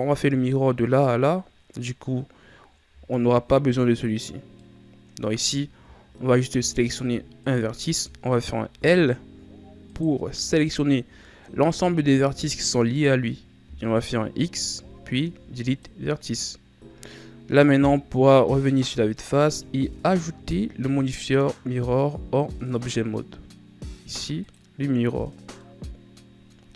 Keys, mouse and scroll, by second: 3.0-4.5 scroll up 2, 4.5 middle click, 5.5-5.9 scroll down 5, 5.9-7.3 scroll up 6, 7.3 right click, 8.6 l, 9.8 right click, 10.3 l, 11.3-12.3 scroll down 8, 14.4 x, 17.7 KP_1, 19.1-19.8 scroll up 4, 19.8 Tab, 22.6-25.2 drag, 25.2-25.5 scroll down 2, 25.5-26.7 middle drag.